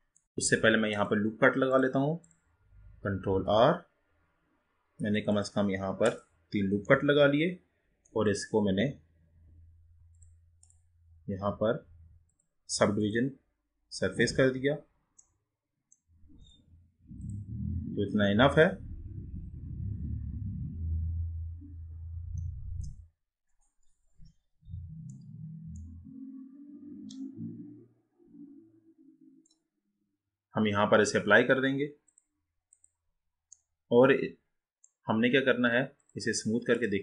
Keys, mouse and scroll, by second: 0.9 click, 1.7-3.3 drag, 3.3 ctrl+r, 6.1 click, 7.0-9.9 middle drag, 10.3-12.5 drag, 14.5 click, 15.4-17.3 middle drag, 17.3-20.4 drag, 25.9-29.1 middle drag, 32.3-33.7 drag, 33.7-36.2 middle drag, 36.2-37.0 right drag.